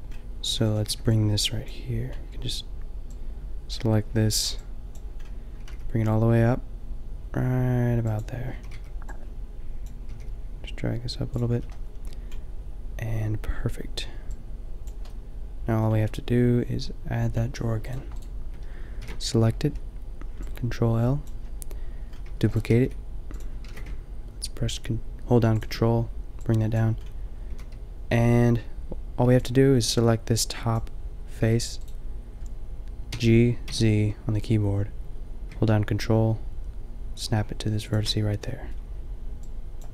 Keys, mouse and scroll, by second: 0.4 a, 0.6 a, 0.8 b, 4.4 click, 5.6 g, 8.5 a, 8.7 b, 10.0 g, 10.6 middle click, 11.4 a, 13.3 middle click, 15.5-17.3 middle drag, 19.0 ctrl+l, 21.2 ctrl+l, 22.1-23.4 drag, 22.2 shift+d, 22.7 g, 23.6 g, 27.5 a, 29.2 b, 31.4 g, 33.1 g.